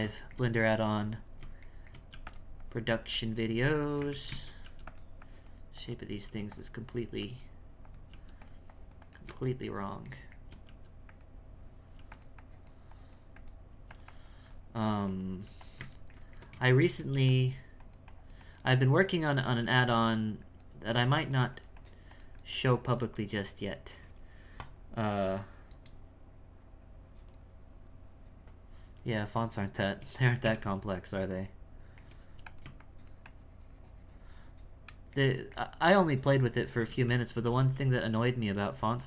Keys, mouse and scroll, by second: 2.6-4.1 drag, 4.1 ctrl+z, 4.3 ctrl+z, 5.2-6.2 drag, 6.9-8.1 drag, 8.7 click, 9.5-10.6 shift+middle drag, 11.9 f, 12.4-13.7 drag, 13.7 f, 14.0-15.4 drag, 15.4 f, 16.0-17.1 ctrl+middle drag, 17.8-19.6 drag, 20.1 click, 21.1-25.9 drag, 29.4 middle click, 30.4 KP_1, 31.6 shift+middle click, 32.8-35.2 shift+drag, 35.2-36.9 shift+middle drag, 36.9 f, 37.3 f, 37.7-38.8 drag.